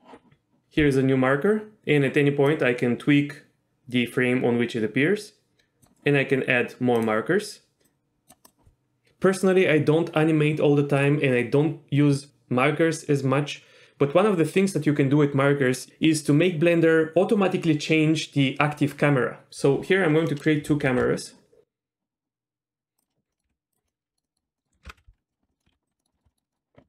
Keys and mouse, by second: 2.8-5.9 drag, 7.1-8.5 drag, 20.5 middle click, 21.0 shift+a, 23.4 middle click, 23.5 g, 24.0-24.8 middle drag, 24.9 ctrl+alt+KP_0, 25.3 middle drag, 25.7 shift+f, 25.7 shift+d, 25.9 click, 26.2 shift+middle click, 26.3 middle click.